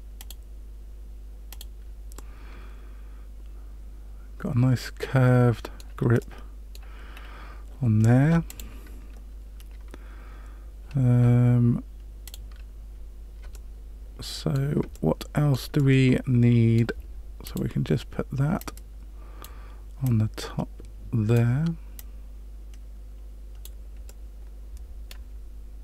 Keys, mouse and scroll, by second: 0.1 click, 1.5 click, 2.1 middle click, 6.2 middle click, 7.1-8.4 scroll down 2, 8.4 click, 12.2 click, 13.5 middle click, 14.9 shift+middle click, 15.7 middle click, 17.4 click, 18.5 click, 20.0 click, 21.9 click, 24.0 middle click.